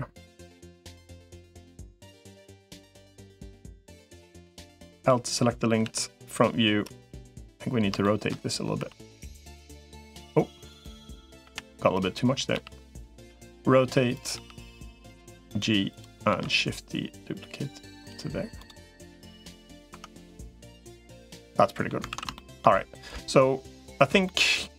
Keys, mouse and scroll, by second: 0.2 middle click, 1.4 g, 2.7 middle click, 4.8 l, 5.6 KP_1, 7.8 shift+middle click, 8.6 r, 11.2 l, 12.4 g, 13.2 r, 14.2 g, 16.2 shift+d, 18.4 click, 18.6 middle click, 19.8 Tab, 20.4-21.7 middle drag, 22.0 ctrl+s, 22.1 shift+middle click, 24.0 shift+middle click.